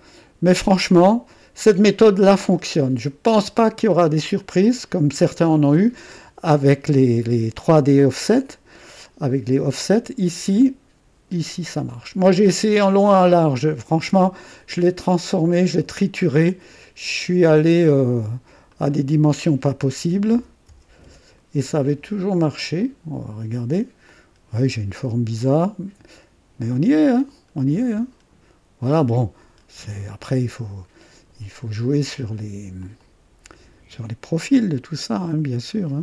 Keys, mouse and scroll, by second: 0.8 typing, 1.6-4.1 drag, 2.8-3.5 typing, 4.4 click, 9.2-13.6 drag, 14.8 click, 18.7 click, 20.0 KP_1, 20.1 KP_1, 20.3 KP_0, 20.6 KP_0, 21.0 KP_Enter, 22.8 click, 23.1 typing, 24.1-25.7 drag, 26.7-30.7 drag, 28.2 typing, 29.5 typing, 32.8 click, 33.1 typing, 35.1-36.0 drag.